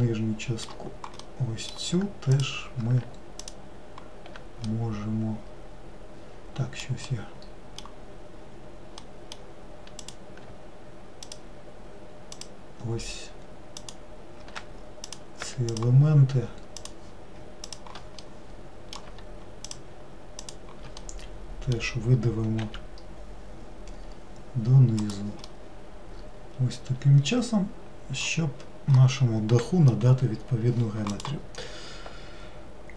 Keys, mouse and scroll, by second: 2.3 click, 3.4 alt+click, 4.7-10.0 middle drag, 10.0 click, 11.3 alt+click, 12.3 alt+click, 13.8 alt+click, 15.1 click, 15.8 shift+click, 16.8 shift+click, 17.7 shift+click, 18.2-19.7 middle drag, 19.7 shift+click, 20.5 shift+click, 21.0-22.6 middle drag, 22.6 e, 25.5-28.6 middle drag, 28.6-29.0 scroll down 1, 29.0-32.1 middle drag.